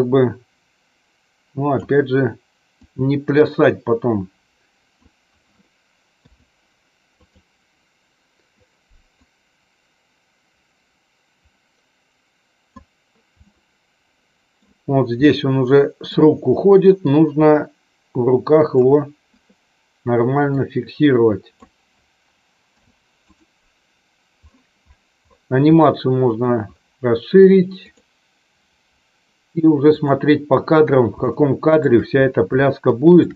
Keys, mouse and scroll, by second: 2.8-5.0 drag, 6.1 i, 9.3-12.8 drag, 13.5-14.5 middle drag, 15.2 middle click, 17.0-18.7 drag, 20.3-21.6 drag, 25.7 middle click, 28.0 click, 30.1 click, 31.2 shift+middle click, 32.6 shift+middle click.